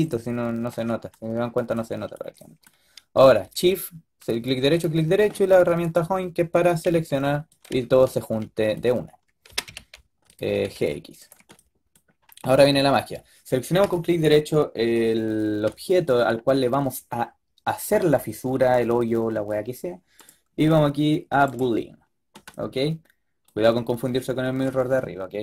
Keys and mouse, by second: 0.0 middle click, 3.6-7.9 right drag, 5.7-6.7 drag, 6.7 g, 9.4 g, 10.5 g, 13.8-15.6 drag, 15.6-24.9 middle drag.